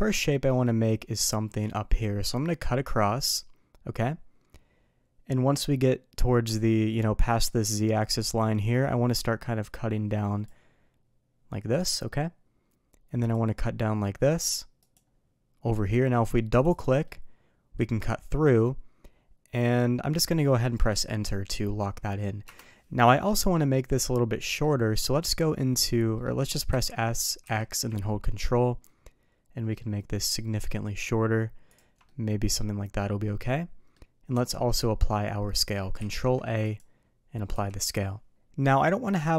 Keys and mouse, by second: 2.9-10.4 drag, 17.0-22.6 middle drag, 23.0 middle click, 23.7 middle click, 24.4 middle drag, 26.1 middle drag, 26.7 s, 32.0-33.9 middle drag, 34.3 n, 36.0 ctrl+a, 37.5 n, 38.3 middle drag.